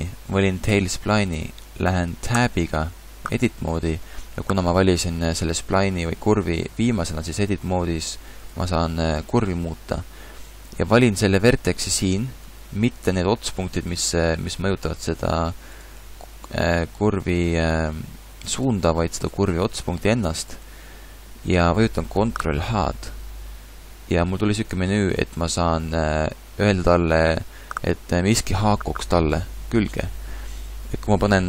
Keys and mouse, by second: 2.4 Tab, 12.4 middle click, 14.8 r, 16.0 g, 19.4 g, 22.8 ctrl+h.